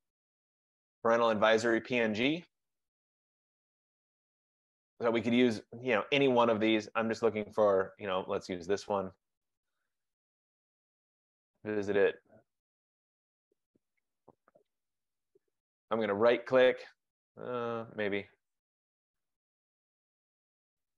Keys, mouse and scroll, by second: 0.6-1.3 typing, 8.6 click, 11.2 click, 14.9 middle click, 15.0 middle click, 15.1 middle click, 16.3 right click, 17.8 middle click, 17.9 middle click, 20.1 click.